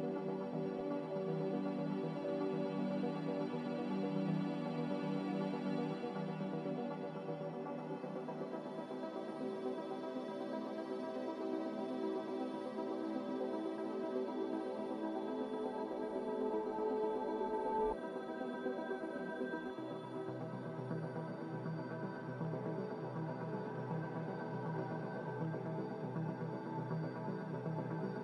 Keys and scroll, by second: 17.1 z, 20.7-21.6 typing.